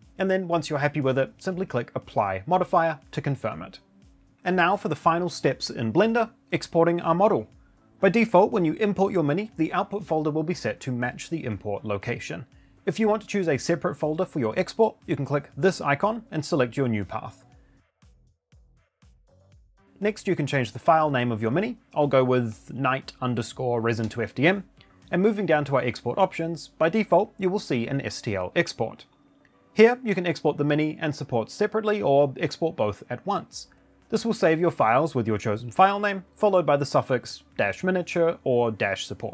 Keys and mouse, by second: 0.2 shift+middle drag, 0.9 middle click, 3.6 click, 17.6 click, 21.4 click, 21.7 shift+middle click, 22.6 click, 23.2-24.5 shift+middle drag, 24.5 click, 24.6 shift+middle click, 25.4 click, 36.2 click.